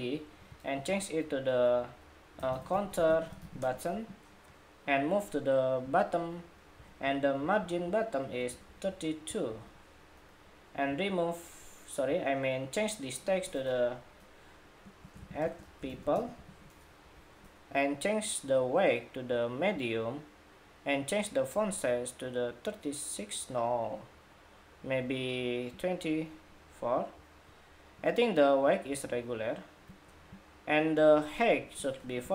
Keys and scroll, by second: 0.5 super+r, 7.1 alt+shift+Up, 7.7 alt+shift+Up, 8.4 alt+Up, 9.3 alt+Down.